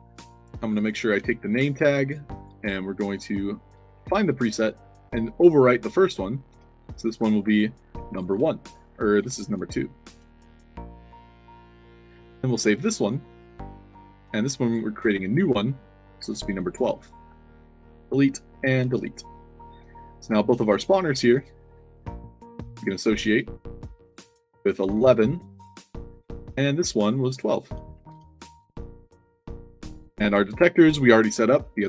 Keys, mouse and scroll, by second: 0.0 middle drag, 0.7 click, 1.1 ctrl+c, 1.3 click, 2.0 click, 2.3 click, 2.9 click, 3.8 ctrl+v, 4.6 click, 5.7 click, 6.4 ctrl+v, 7.3 space, 8.0 1, 9.2 2, 9.7 ctrl+a, 10.0 ctrl+c, 10.5 click, 11.1 click, 12.5 click, 13.4 click, 14.6 click, 14.8 ctrl+v, 16.2 1, 16.9 click, 18.1 click, 19.1 click, 19.5 click, 19.7 f, 20.7 click, 21.2 f, 23.1 click, 23.9 click, 24.7 1, 25.4 click, 26.1 click, 27.0 click, 27.6-28.5 typing, 27.6 click, 28.6 click, 29.6 click.